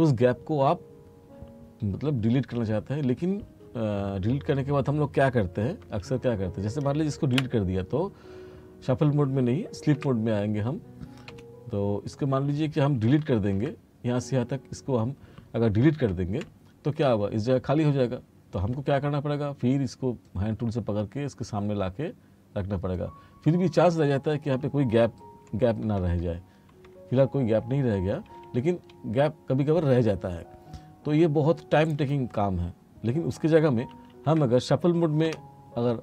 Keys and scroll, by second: 6.0 ctrl+z, 7.4 Delete, 10.0 F1, 11.4 F2, 16.2 Delete, 25.6 t, 27.5 r, 31.2 r, 34.0 ctrl+z, 35.3 F1.